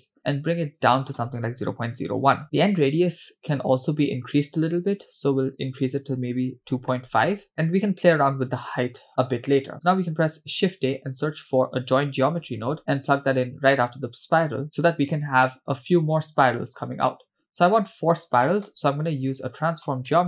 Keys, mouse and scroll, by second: 5.0-7.5 drag, 8.6-9.3 scroll down 2, 9.3-9.7 drag, 10.3 shift+a, 17.9 click, 18.5 middle click, 19.0 shift+a.